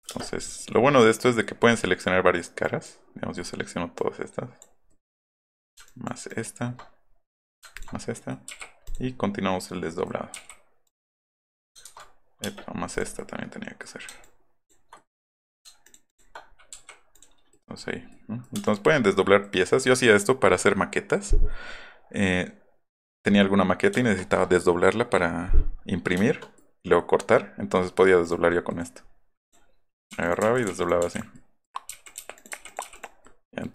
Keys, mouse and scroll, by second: 0.1 space, 0.2 middle click, 3.9-4.6 drag, 5.1 middle click, 10.4 o, 12.4 space, 12.7 middle click, 12.9 click, 13.2 scroll up 2, 14.2-14.7 ctrl+drag, 17.1 middle click, 17.4 middle click, 17.9 middle click, 18.1 middle click, 18.5 space, 22.9 click, 23.2 middle click, 29.4 middle click, 30.1 o, 30.4 o, 31.1 click, 31.9-33.3 typing, 32.0 click, 32.3 click, 33.2 middle click.